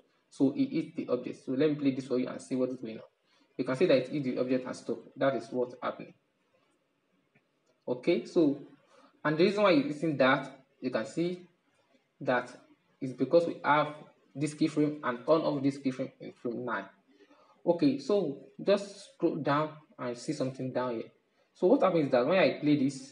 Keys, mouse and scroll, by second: 0.9-4.0 drag, 4.1-8.7 drag, 8.7-14.2 middle drag, 15.6-17.6 middle drag, 17.6-18.5 scroll up 5, 18.5-21.8 shift+middle drag, 21.8-23.1 drag.